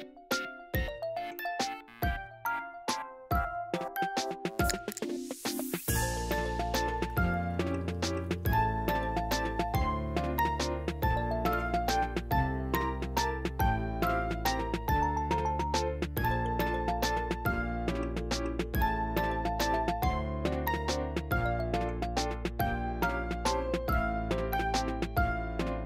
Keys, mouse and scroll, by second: 0.0 click, 0.2 scroll down 1, 0.3-2.0 drag, 2.0 middle click, 2.1 click, 2.7 scroll up 2, 2.7 middle click, 2.9 click, 3.8 middle click, 3.9 click, 4.7 m, 4.8 scroll down 2, 4.8 middle click, 5.5 ctrl+z, 6.3 m, 6.6 shift+middle click, 7.3 click, 8.1-9.6 middle drag, 9.6 click, 9.7 ctrl+z, 9.8-10.1 scroll up 1, 10.1 click, 10.5 shift+middle click, 10.8 click, 11.1 middle click, 11.2 click, 11.3 scroll down 2, 11.6 click, 11.9 middle click, 12.2 scroll up 2, 12.4 middle click, 12.6 click, 13.3 middle click, 13.5 click, 13.6 middle click, 13.8 ctrl+z, 13.9 click, 14.3 ctrl+z, 14.9-15.9 drag, 15.9 middle click, 16.8 click, 18.8 middle click, 19.2-19.5 scroll down 3, 19.5 click, 19.8-20.3 scroll up 5, 20.3 scroll down 1, 20.4 `, 20.5 shift+middle click, 20.6 scroll up 1, 20.7 m, 20.9 click, 21.3 ctrl+z, 21.5 click, 21.8 ctrl+z, 21.9-22.9 drag, 23.0 ctrl+z, 23.2 click, 23.8 ctrl+z, 23.8 scroll up 2, 24.0 click, 24.4 middle click, 24.5 scroll down 1, 24.6 middle click, 25.0 click, 25.3 middle click, 25.4 scroll down 1, 25.6 click, 25.8 ctrl+z.